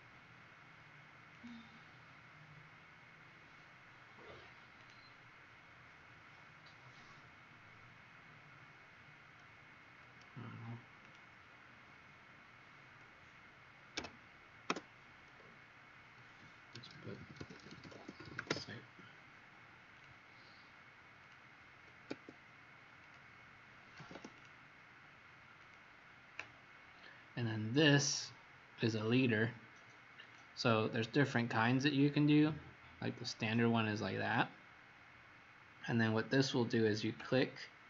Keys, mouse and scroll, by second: 1.2 click, 13.9 0, 14.6 Return, 16.4-18.9 typing, 19.9 click, 22.0 Escape, 22.9 click, 24.0 m, 24.3 click.